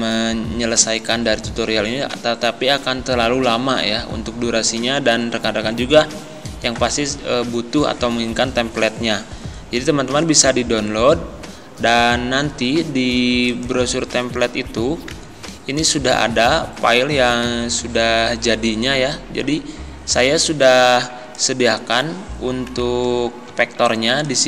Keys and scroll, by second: 23.6 z.